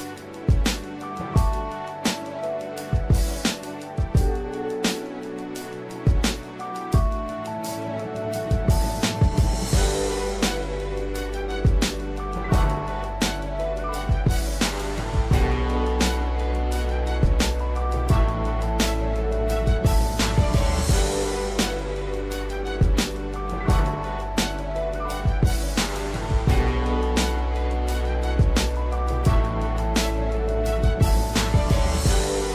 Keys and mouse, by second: 1.1 shift+middle click, 2.1 shift+middle click, 2.6 click, 3.1 click, 3.4 click, 5.9 click, 7.1 shift+middle click, 8.0 middle click, 9.2 shift+middle click, 10.5 2, 11.0 click, 12.1-13.7 typing, 15.3 middle click, 19.7 middle click, 20.7 e, 24.0 middle click, 25.8 click, 25.9 click, 28.5 shift+middle click, 28.9 1, 30.3 click, 30.8 shift+middle click, 31.2 click, 32.3 click.